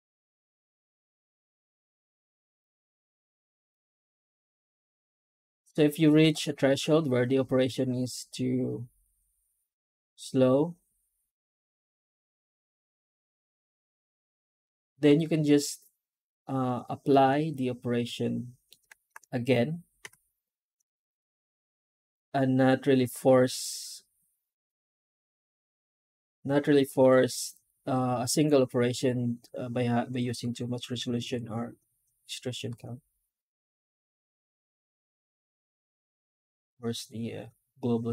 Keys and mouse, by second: 16.9-18.6 middle drag, 19.4-19.9 drag, 19.9 F9.